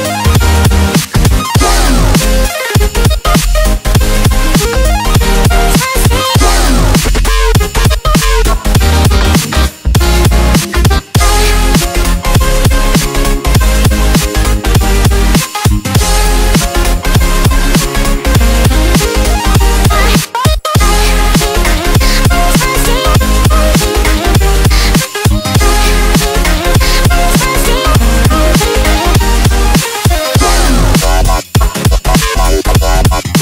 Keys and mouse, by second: 2.6 Return, 5.3 click, 6.3 ctrl+t, 7.1-10.2 drag, 10.2 Return, 13.5 ctrl+j, 15.0-17.6 drag, 17.6 ctrl+t, 18.1-31.0 drag, 31.0 Return, 32.0 click.